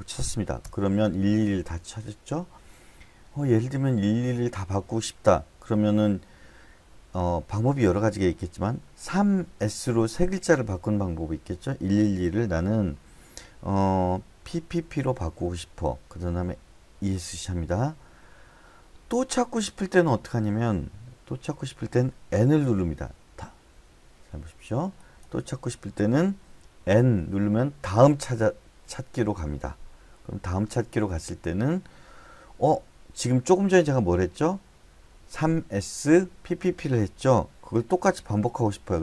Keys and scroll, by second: 0.6 Return, 9.0-10.0 typing, 14.4 p, 14.7 p, 15.0 p, 17.0 Escape, 22.9 n, 26.8 n.